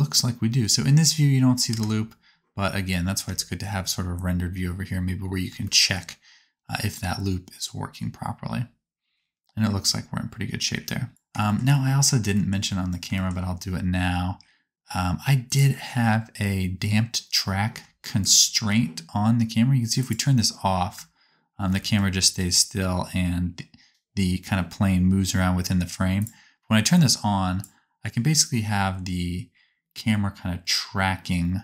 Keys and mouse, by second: 1.7 KP_0, 4.7-7.9 middle drag, 11.1 shift+click, 11.1 space, 12.3 shift+click, 13.1 shift+click, 15.4 click, 15.4 right click, 20.0 click, 20.0 right click, 21.0 space, 23.8-27.0 right drag, 26.2 click, 27.0-29.8 middle drag.